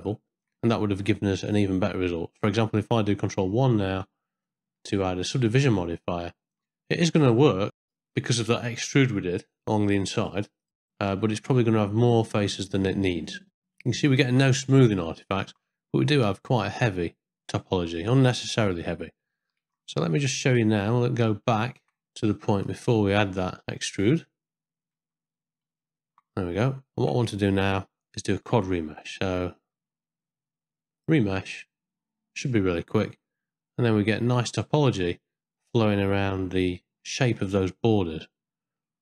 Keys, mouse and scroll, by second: 0.1 shift+middle click, 4.3 ctrl+1, 4.5 middle click, 6.3 middle click, 6.9 ctrl+middle click, 7.7 ctrl+middle click, 8.7 shift+middle click, 9.1 middle click, 13.2 middle click, 13.8 ctrl+middle click, 14.2 shift+middle click, 14.6 middle click, 15.2 ctrl+middle click, 16.2 z, 17.2 ctrl+middle click, 18.3 middle click, 20.3 ctrl+z, 20.3 middle click, 20.8 middle click, 21.3 ctrl+middle click, 21.7 shift+middle click, 22.0 ctrl+z, 22.2 ctrl+z, 22.7 ctrl+z, 23.2-23.6 ctrl+z, 24.1 ctrl+z, 24.9 ctrl+z, 25.6 ctrl+z, 26.4 middle click, 26.8 ctrl+middle click, 27.2 middle click, 28.5 Tab, 29.9 z, 31.1-32.9 drag, 33.2-35.6 middle drag, 36.8 middle click, 37.3 shift+middle click, 37.7-38.8 middle drag.